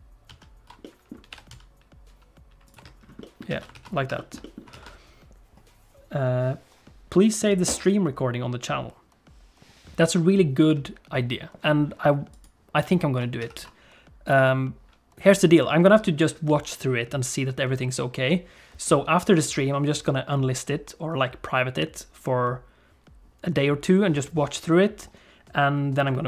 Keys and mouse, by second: 0.3 ctrl+z, 0.8 middle click, 1.3 g, 2.7 Tab, 3.2 alt+middle click, 3.5 alt+a, 3.7 ctrl+s, 4.1 shift+middle click, 4.4 middle click, 4.7 ctrl+s, 12.4 click, 13.4 ctrl+s, 14.2 click.